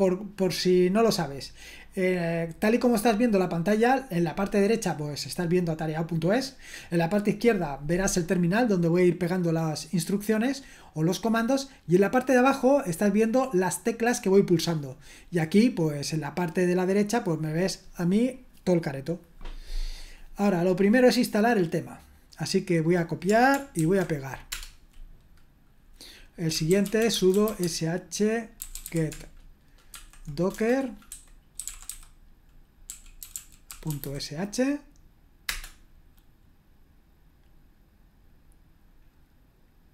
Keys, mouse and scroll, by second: 21.4 right click, 22.2 click, 23.1 click, 23.8 ctrl+alt+v, 24.5 Return, 26.3-34.5 typing, 35.5 Return.